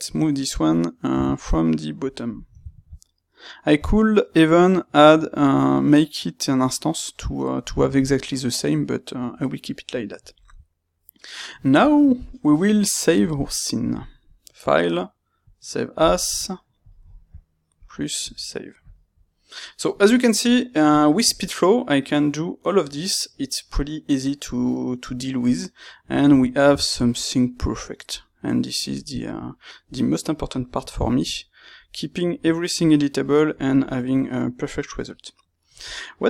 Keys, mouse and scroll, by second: 1.0 g, 1.2 middle click, 2.1 click, 2.2-14.6 middle drag, 3.7 g, 6.6 click, 14.6-15.6 drag, 18.3 click, 19.1-36.2 middle drag.